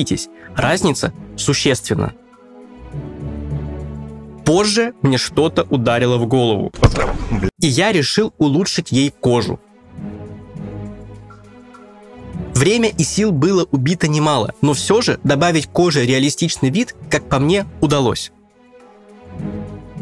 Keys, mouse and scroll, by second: 1.8 shift+middle click, 1.8 click, 1.8 scroll down 1, 2.5 click, 2.9 scroll up 2, 2.9-3.3 scroll down 2, 3.6 click, 3.8 ctrl+z, 3.8 middle click, 4.2-4.6 scroll down 2, 4.4 shift+middle click, 4.4-4.8 scroll up 4, 4.6 click, 4.6 middle click, 5.0 click, 5.0-5.6 scroll down 2, 5.2 middle click, 5.2 click, 5.4 scroll up 2, 5.6 scroll down 1, 5.6 scroll down 1.